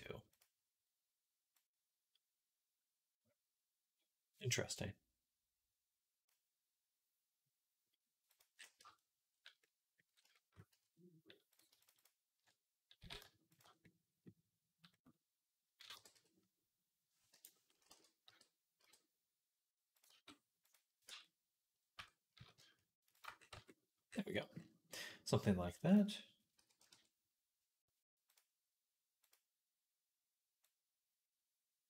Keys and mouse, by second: 8.2 right click, 8.6 Tab, 8.6-9.7 middle drag, 10.1 shift+middle click, 10.5 Tab, 11.5 shift+right click, 11.8 alt+shift+right click, 12.8 s, 13.0-15.2 shift+right drag, 15.2-21.6 drag, 15.8 g, 17.8 g, 19.9 s, 20.9 Tab, 21.8 Tab, 22.2 s, 23.3 Tab, 23.9-31.8 right drag, 25.7-31.8 drag.